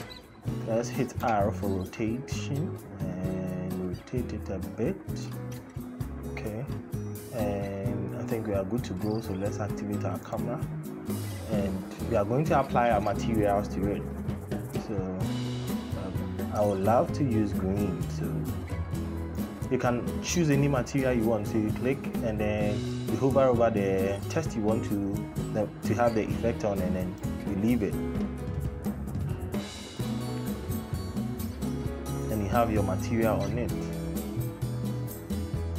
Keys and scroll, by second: 1.0 r.